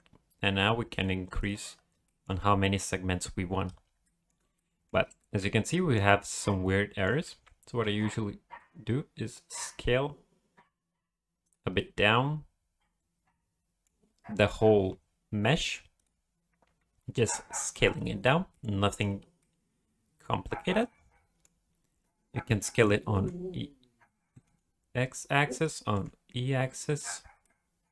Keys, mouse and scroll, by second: 0.9 click, 1.4 click, 1.7 scroll down 1, 2.0 shift+middle click, 3.5-3.9 scroll up 2, 4.0 shift+middle click, 4.5 middle click, 5.2 shift+middle click, 5.4-5.7 scroll up 2, 5.7 middle click, 6.6 middle click, 7.3 a, 7.8 s, 11.8 middle click, 16.0 click, 17.9 click, 18.5 middle click, 19.2 scroll down 2, 19.4 middle click, 21.6-22.4 scroll up 1, 22.7 middle click, 23.0 s, 25.8 s, 27.3 scroll down 1, 27.4 middle click.